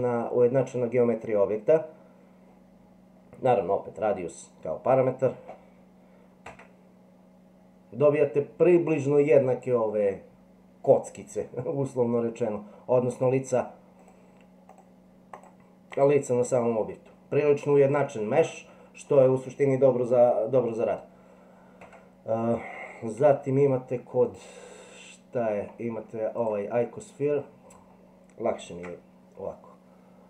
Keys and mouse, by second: 6.5 Tab, 14.7 click, 15.3 click, 15.9 click, 21.8 Tab, 23.2 Delete, 24.3-25.6 drag, 26.4-27.7 drag, 28.7 shift+a.